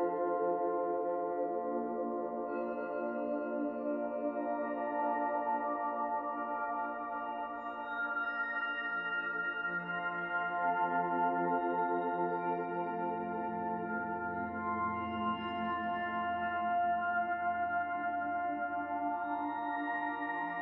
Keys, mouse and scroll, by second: 0.8 middle click, 1.5-1.9 scroll up 1, 2.1 shift+middle click, 2.6 middle click, 4.1-4.6 scroll down 1, 4.6 scroll down 2, 4.7 middle click, 5.7 click, 7.1 middle click, 7.7 middle click, 9.5 r, 10.8 middle click, 12.1 click, 13.3 middle click, 14.3 middle click, 15.4 click, 16.7 click, 17.4 middle click, 18.0-19.8 scroll down 1, 20.1 middle click.